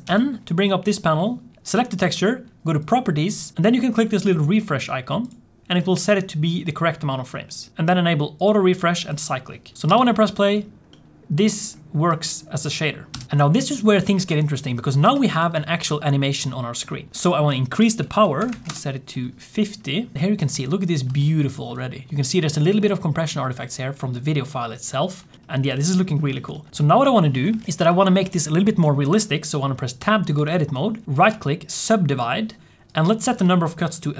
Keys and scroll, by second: 9.8 Home, 9.8 space, 13.0 space, 14.9 Tab, 17.1 n, 17.1 m, 26.7 z, 27.5 alt+a, 27.7 ctrl+s, 30.1 Tab, 32.6 1.